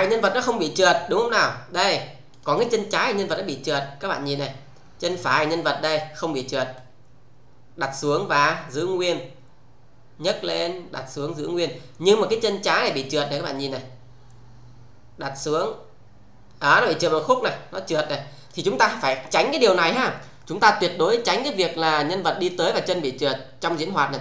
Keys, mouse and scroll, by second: 2.3 click, 3.6-5.1 click, 6.7-11.7 click, 13.5-18.4 click, 20.0 scroll up 1, 21.7 click, 23.6 click.